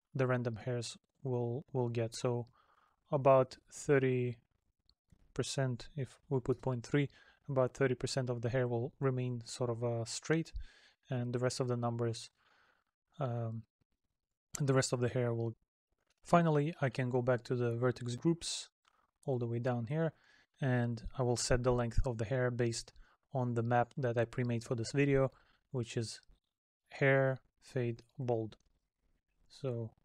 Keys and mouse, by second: 29.1 middle click.